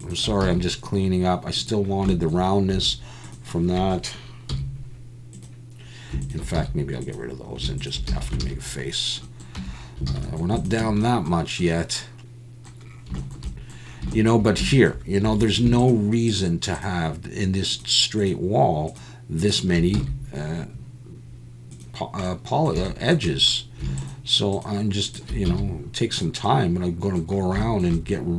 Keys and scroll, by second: 0.4 x, 2.7 1, 4.5 x, 6.6 x, 8.1 f, 8.4 alt+a, 9.6 Tab, 10.1 alt+a, 10.8 Tab, 15.3 2, 19.9 x, 25.5 x.